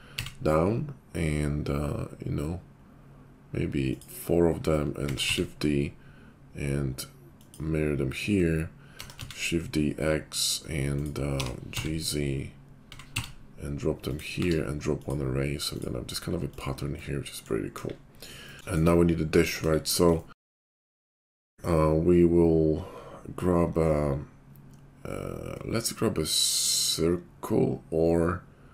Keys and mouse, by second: 5.1 shift+d, 8.9 shift+d, 11.3 g, 14.3 q, 15.1-28.7 drag, 17.8 KP_5, 19.6 KP_5, 20.7 shift+a.